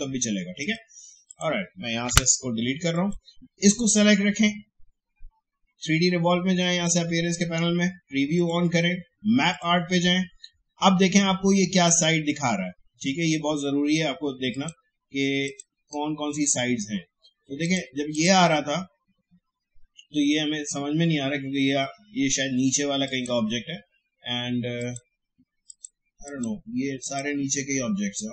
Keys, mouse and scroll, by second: 2.1 Delete, 2.9 click, 6.6 click, 14.5 click, 23.0 click.